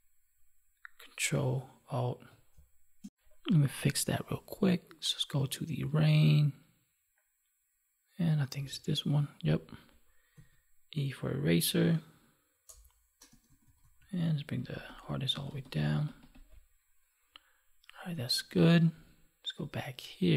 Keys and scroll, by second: 2.5 space.